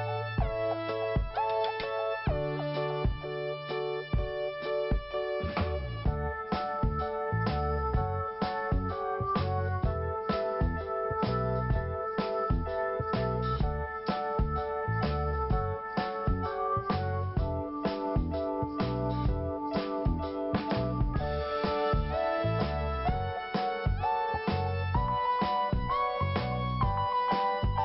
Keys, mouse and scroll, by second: 0.0 click, 0.1 click, 0.5 scroll up 1, 1.6 click, 5.2 click, 10.3 click, 11.6 click, 12.4 p, 14.2 click, 14.3 click, 15.6 click, 15.7 click, 16.7 click, 18.4 click, 21.5 click, 22.6 t, 23.1 scroll down 2, 24.5 scroll up 1, 25.9 click.